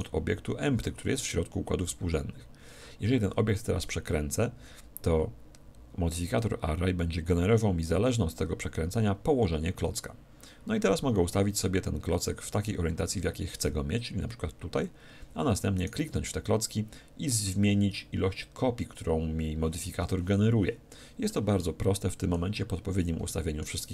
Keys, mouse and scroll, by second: 3.8 r, 12.5-14.3 drag, 15.7-17.5 right drag, 20.9-23.9 middle drag.